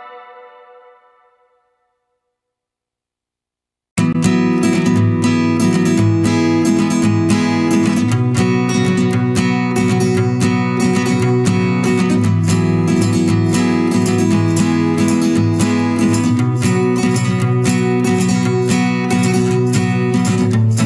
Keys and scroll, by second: 9.1 ctrl+a, 9.7 Delete, 10.4 ctrl+d.